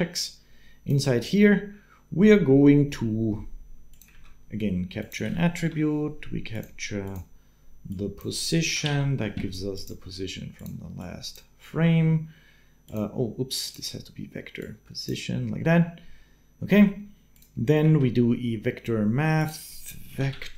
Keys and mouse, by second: 3.9 shift+a, 17.7 shift+a.